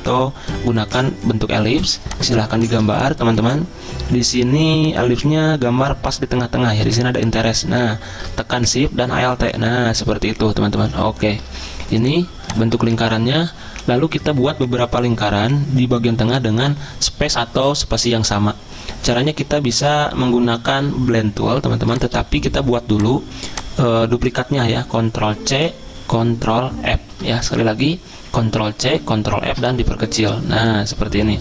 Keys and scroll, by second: 1.8 z, 25.5 ctrl+c, 27.0 ctrl+f.